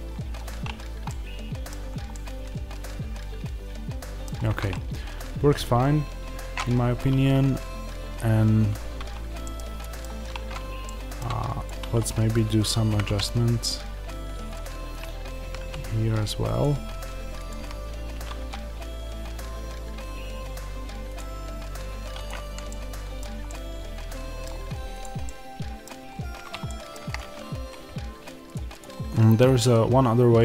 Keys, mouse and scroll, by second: 0.0-0.4 scroll down 1, 0.4 Tab, 1.0 middle click, 1.6-1.9 scroll down 1, 2.0 middle click, 4.3-6.9 scroll down 1, 6.9 Tab, 8.1-8.7 scroll down 1, 8.7 Tab, 9.3 middle click, 10.2 Tab, 10.7 middle click, 11.5 click, 12.8 g, 14.4 click, 15.4 g, 16.5 click, 17.5 g, 21.0 click, 22.6-24.9 middle drag, 24.9 click, 25.2-30.4 middle drag, 26.0-26.6 scroll up 1, 28.0-28.6 scroll up 1.